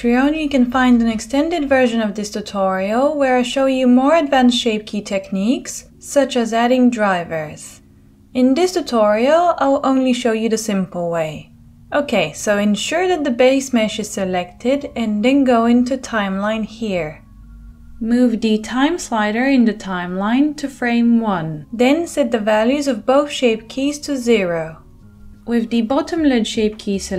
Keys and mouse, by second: 0.8-9.7 drag, 0.8-4.8 right drag, 2.3 g, 5.5 g, 8.4-10.3 middle drag, 10.3-27.1 drag.